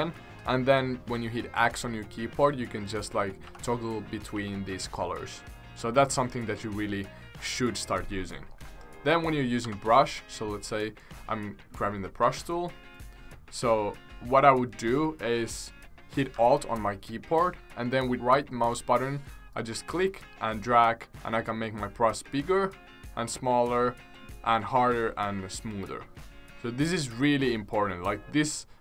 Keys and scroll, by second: 1.5 x, 3.4 x, 4.3 x, 4.7 x, 9.6 b.